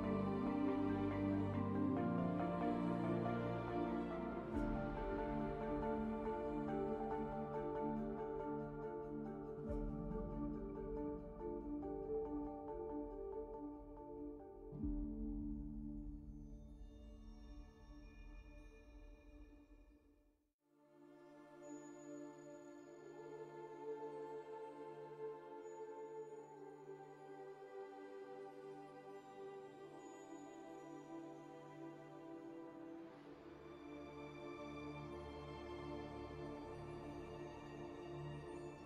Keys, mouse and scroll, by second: 0.0-2.3 typing, 3.1 alt+x, 4.4 r, 6.5 alt+s, 7.2 space, 7.4 F4, 7.5 2, 7.8 q, 9.0 2, 9.6 F4, 11.6 F4, 12.3 alt+q, 13.5 5, 17.2 ;, 17.5 4, 18.4 ctrl+space, 19.3 alt+z, 21.7 z, 22.4 shift+h, 24.0 ctrl+space, 24.9 shift+space, 25.1 r, 26.0 2, 26.3 q, 28.0 1, 28.5 shift+w, 29.6 4, 31.0 ctrl+space, 31.2 z, 31.3 w, 31.6 b, 34.3 r, 34.9 2, 35.2 alt+s, 35.8 2, 35.8 q.